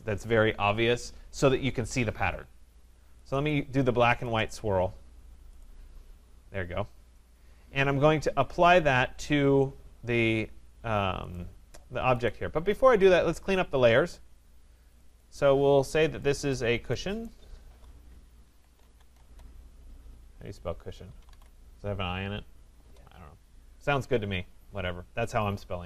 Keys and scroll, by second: 22.8 Return.